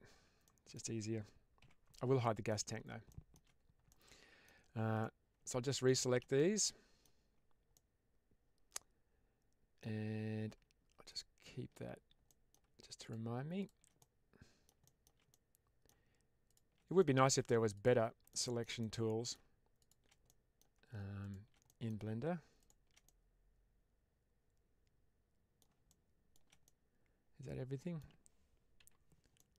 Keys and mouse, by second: 0.4 middle drag, 1.5 h, 2.1-2.5 middle drag, 3.0 middle drag, 3.8-4.3 middle drag, 6.2-6.9 middle drag, 7.6-9.8 middle drag, 11.0 shift+click, 12.2 middle drag, 12.9 shift+click, 13.9-14.5 middle drag, 14.7 shift+middle click, 15.2-15.9 middle drag, 16.9 middle click, 18.2-18.5 shift+middle drag, 18.7-19.2 middle drag, 19.7 shift+click, 20.2-20.5 middle drag, 21.1 shift+click, 21.6 middle drag, 22.9-25.5 middle drag, 25.8-26.2 shift+middle drag, 26.5-27.9 middle drag, 29.3 middle click.